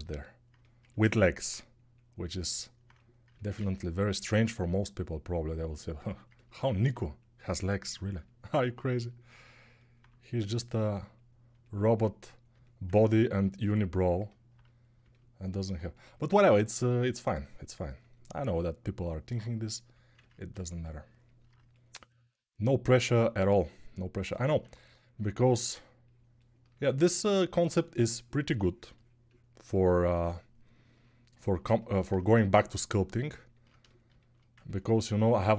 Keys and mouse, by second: 24.4 1, 34.1-35.5 ctrl+alt+drag.